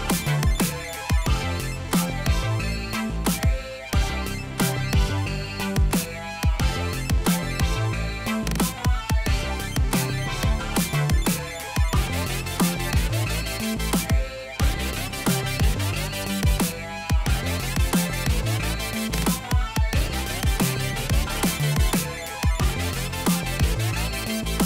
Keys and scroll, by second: 10.7-15.2 typing, 16.7-19.0 typing.